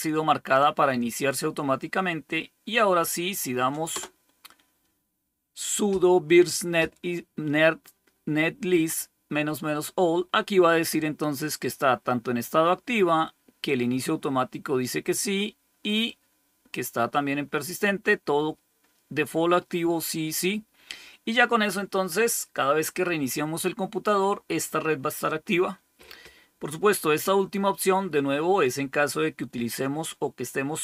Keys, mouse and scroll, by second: 3.8 Return, 11.6 click, 13.5-14.7 drag, 15.9 click, 20.2 click.